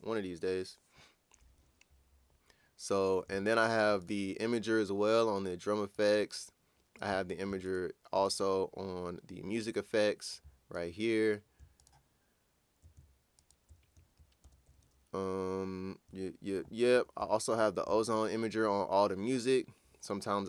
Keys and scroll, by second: 14.4 ctrl+super+w.